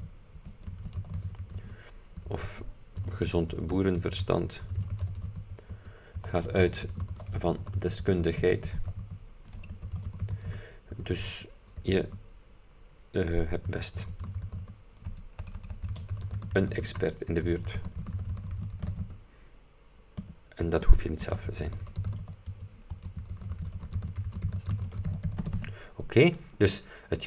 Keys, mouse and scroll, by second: 0.0-19.5 typing, 20.7-26.1 typing.